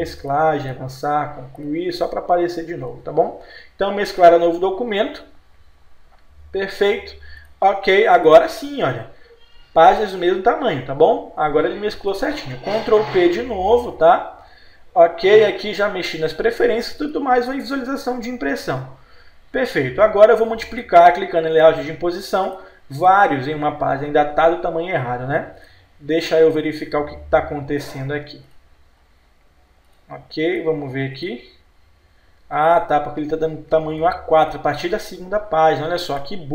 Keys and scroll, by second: 13.4 ctrl+p.